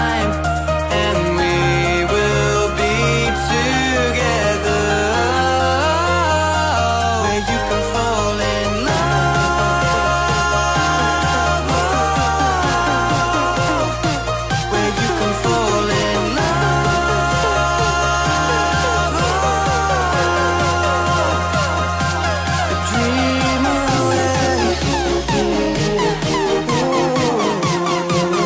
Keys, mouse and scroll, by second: 0.0 middle click, 0.3 right click, 0.9 middle click, 1.3 right click, 1.5 click, 1.9 ctrl+x, 2.0 middle click, 2.4 right click, 2.7 click, 3.1 ctrl+x, 3.2 middle click, 3.3-13.7 typing, 4.0 Tab, 4.0 right click, 4.5 Tab, 4.7 Tab, 4.7 right click, 4.8 Tab, 4.9 right click, 5.3 Tab, 5.3 right click, 5.7 right click, 6.1 right click, 6.4 Tab, 6.4 right click, 6.9 click, 6.9 right click, 7.2 middle click, 7.3 right click, 8.1 ctrl+e, 8.7 right click, 9.1 middle click, 9.3 ctrl+z, 9.7 ctrl+z, 10.1 click, 10.5 ctrl+z, 10.8 ctrl+s, 11.1 right click, 11.6 middle click, 12.0 right click, 12.1 middle click, 12.9 ctrl+x, 13.1 click, 13.3 click, 13.5 ctrl+KP_Add, 13.5 ctrl+KP_Subtract, 14.4 Tab, 14.4 middle click, 14.7 Tab, 14.8 a, 14.8 u, 15.2 u, 15.6 Tab, 15.6 ctrl+z, 15.9 ctrl+s, 16.1 a, 17.9 Tab, 18.0-19.1 typing, 18.1 Tab, 18.3 ctrl+s, 18.3 right click, 24.5-27.6 typing, 24.7 Tab, 24.8 Tab, 24.8 right click, 25.1 right click, 25.2 Tab, 25.6 Tab, 25.6 right click, 25.7 click, 25.9 ctrl+z, 26.1 Tab, 26.1 right click, 26.5 Tab, 26.7 ctrl+z, 26.8 Tab, 26.8 ctrl+s, 27.6 ctrl+c, 28.1 ctrl+n, 28.1 click, 28.3 middle click, 28.4 ctrl+n, 28.4 ctrl+s.